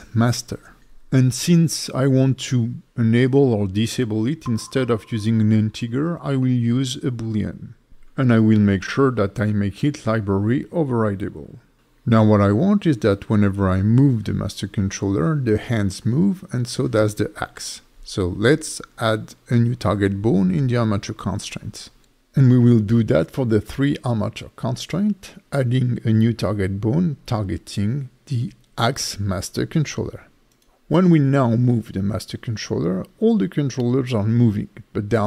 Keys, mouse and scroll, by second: 12.0 shift+middle click, 12.6 click, 13.2 g, 13.9 right click, 14.6 click, 15.1 g, 15.7 right click, 16.5 click, 17.0 click, 17.4 g, 18.1 right click, 19.8 click, 20.1 click, 21.6 click, 22.3 click, 22.7 click, 23.9 click, 27.0 ctrl+c, 27.9 click, 28.5 click, 28.8 click, 29.3 ctrl+v, 29.6 click, 29.8 click, 30.2 click, 30.5 click, 31.1 ctrl+v, 32.7 click, 33.3 g.